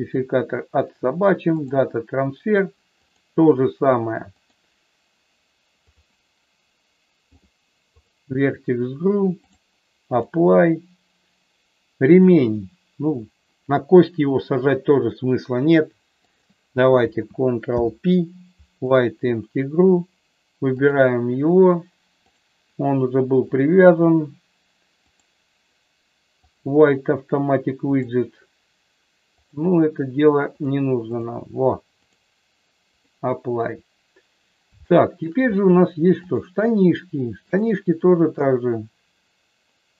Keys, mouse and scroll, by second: 0.1-1.7 drag, 7.3 click, 9.5 click, 12.1 click, 16.3 shift+click, 17.7 ctrl+p, 20.9 click, 22.3 click, 23.7-25.2 drag, 29.4 click, 30.5 click, 32.0-33.0 drag, 34.9 shift+middle click, 36.3 click.